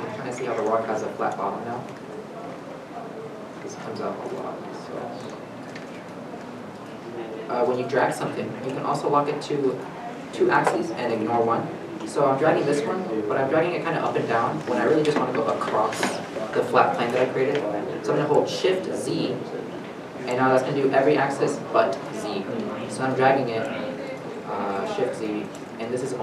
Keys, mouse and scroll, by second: 1.5-1.9 scroll, 1.5 middle click, 1.9 Tab, 6.0 Tab, 6.7 g, 18.7 g, 24.9 shift+z.